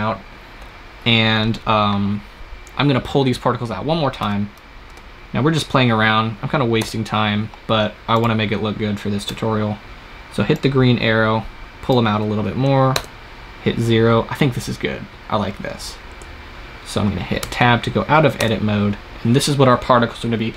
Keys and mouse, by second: 4.1 Tab, 4.8 Tab, 5.4-7.0 drag, 6.6 KP_0, 8.1-9.9 drag, 9.2 Tab, 10.5-12.4 drag, 12.9 KP_0, 16.1 KP_0, 17.3 Tab, 18.3 KP_0.